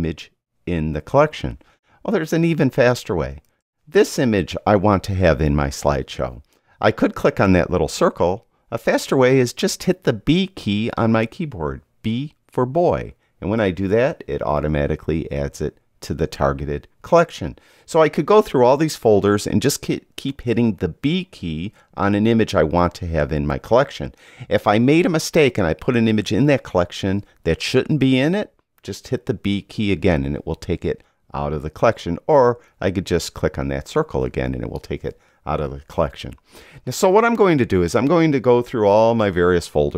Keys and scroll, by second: 13.7 b.